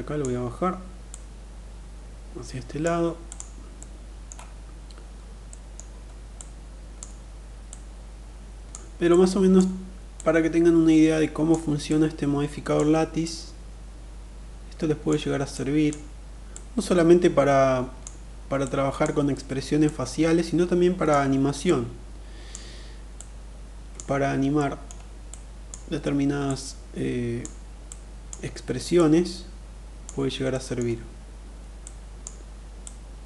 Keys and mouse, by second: 0.5-2.1 drag, 2.6 click, 3.1 middle click, 5.0 middle click, 5.8 click, 7.0-8.2 drag, 8.4 click, 9.5-10.9 drag, 11.2-12.2 drag, 12.8-14.5 drag, 15.1 click, 15.9-17.4 drag, 18.0 click, 19.2-20.5 drag, 21.0 click, 22.5 click, 24.0 middle click, 24.6 click, 25.9 click, 27.4 click, 28.4-29.5 drag, 30.0 middle click, 31.3 click, 32.3-33.2 drag.